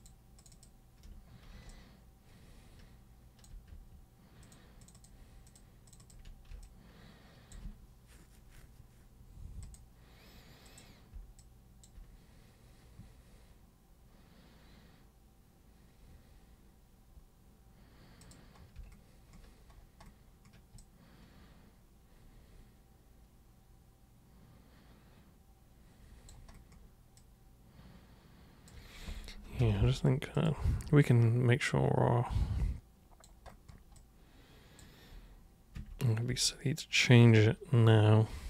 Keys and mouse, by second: 0.0 ctrl+shift+super+click, 0.4 ctrl+shift+super+click, 1.7-3.4 alt+super+drag, 4.4 ctrl+super+click, 4.8 ctrl+super+click, 4.9 ctrl+super+click, 5.5 ctrl+super+click, 5.8 ctrl+super+click, 6.6 alt+super+click, 9.6 super+click, 10.6 super+click, 11.3-11.8 alt+super+drag, 18.2 super+click, 20.8-26.3 alt+super+drag, 27.2-28.7 alt+super+drag, 30.3 super+click, 31.0-33.2 alt+super+drag, 34.0 alt+super+click, 35.7 super+1, 36.5-38.4 alt+super+drag.